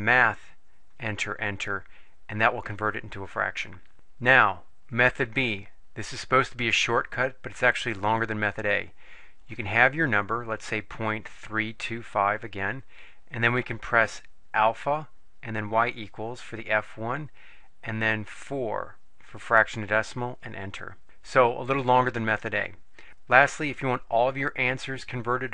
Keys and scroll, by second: 1.1 Return, 1.5 Return, 11.0 ., 11.3 3, 11.9 2, 12.3 5, 18.4 4, 20.3 Return.